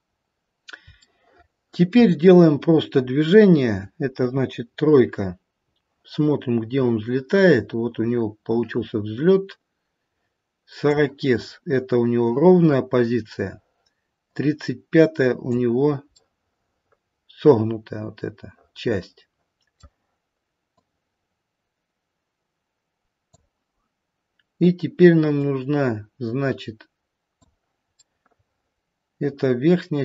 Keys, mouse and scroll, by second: 0.2-1.0 scroll down 3, 1.0 shift+middle click, 2.6-3.3 scroll down 2, 4.2 KP_3, 4.7-5.6 scroll down 1, 5.6-6.9 scroll down 3, 6.9 click, 11.3-13.1 scroll up 3, 14.2 click, 14.2-14.7 scroll up 1, 16.2 middle click, 18.2 middle click, 18.7 middle click, 19.7 middle click, 20.8 click, 25.3 click, 28.0 middle click.